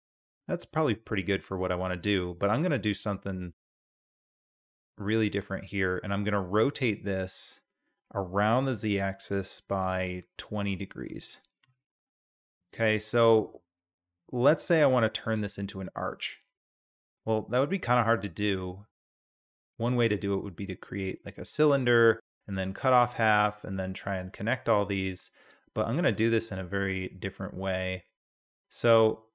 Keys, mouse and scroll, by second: 1.1-2.0 middle drag, 3.9-4.8 middle drag, 6.6 r, 12.5-13.4 drag, 14.3 Tab, 15.2-15.7 drag, 16.6-17.0 drag, 17.7-19.1 drag, 24.8-25.3 drag, 25.3-28.3 middle drag.